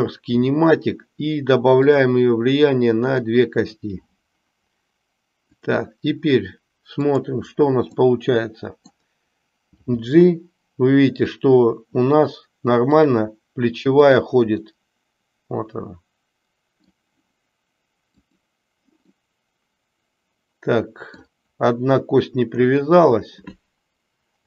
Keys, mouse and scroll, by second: 1.7 click, 3.1 click, 3.7 click, 5.6 click, 6.9 click, 7.9-8.9 middle drag, 9.8 g, 13.9 click, 14.6 scroll up 1, 14.8-16.9 middle drag, 18.2 click, 19.1-21.2 middle drag.